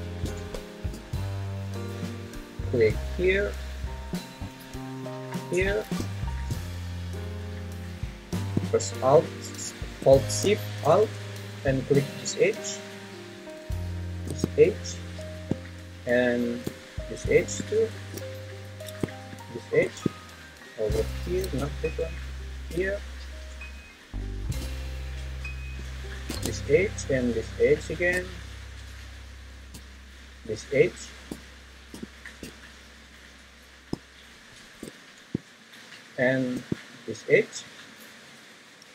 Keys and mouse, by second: 4.5 ctrl+z, 21.2 ctrl+z, 22.3 shift+click.